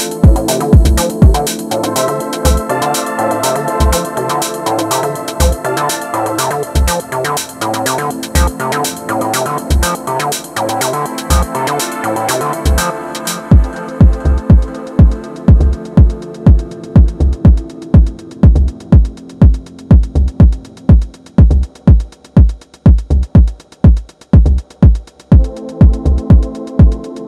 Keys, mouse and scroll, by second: 0.1 shift+click, 1.0 ctrl+z, 1.4 ctrl+z, 2.1 shift+click, 2.8 shift+click, 3.5 shift+click, 4.4 click, 5.0-7.2 middle drag, 7.2 click, 7.9 shift+click, 8.5 shift+click, 9.3 shift+click, 10.5-11.1 drag, 11.1 middle click, 11.7 alt+z, 12.0-15.0 middle drag, 16.2 click, 17.1 ctrl+shift+click, 17.6 ctrl+middle click, 18.4 scroll down 1, 18.6-20.9 middle drag, 20.9 ctrl+shift+click, 21.5 middle click, 22.1 ctrl+z, 22.6 ctrl+shift+click, 23.3-24.3 middle drag, 24.3 ctrl+click, 24.9-27.2 middle drag.